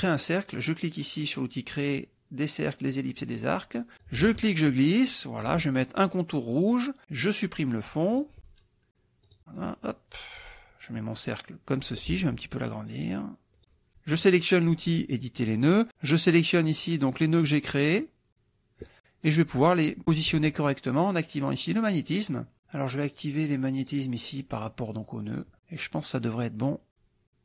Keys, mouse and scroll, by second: 3.1 click, 3.5 middle click, 4.1-5.7 drag, 6.6 click, 8.2 click, 9.3-12.0 drag, 12.9 ctrl+click, 14.2 click, 15.6 click, 16.7 click, 17.3 click, 17.9 click, 21.5 click, 22.1 click, 23.2 click, 23.8 click.